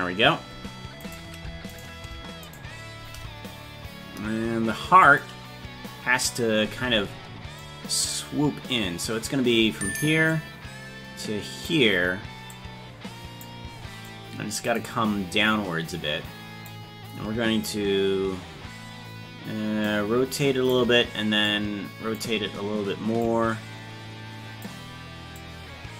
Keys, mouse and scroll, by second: 1.0-2.4 right drag, 5.0 click, 5.0 right click, 7.6-9.3 drag, 10.3-11.6 drag, 12.5 click, 14.0 click, 15.9 click, 19.8 click, 21.5 click, 23.2-24.6 drag, 25.3-25.9 drag.